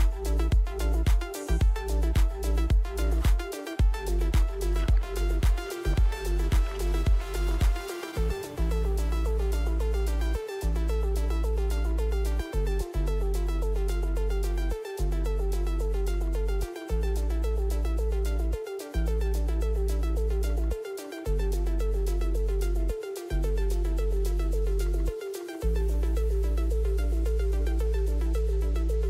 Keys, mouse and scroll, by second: 3.7 Up, 3.7 right click, 8.7 Up, 8.7 right click, 9.7 click, 9.8 right click, 14.9 click, 15.8 alt+click, 19.8 click, 20.3 right click, 23.7-25.2 right drag, 24.3 Up, 25.6 right click, 26.9 right click, 28.1 right click, 28.5 Left.